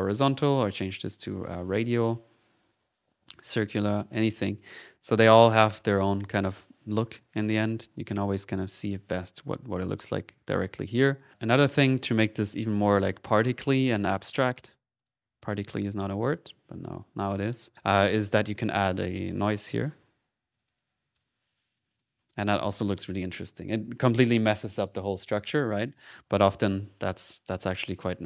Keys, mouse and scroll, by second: 0.6 click, 1.3 click, 2.7 click, 3.4 click, 7.5 ctrl+click, 11.1-11.8 typing, 11.5 ctrl+click, 12.1-13.3 right drag, 13.7 click, 14.9 click, 15.7 click, 16.4 click, 17.7 middle click, 17.9 click, 18.4 middle click, 18.5 right click, 19.1 click, 19.3-20.4 typing, 20.5 click, 21.1 click, 21.7 click, 27.0 click, 28.0-28.2 drag.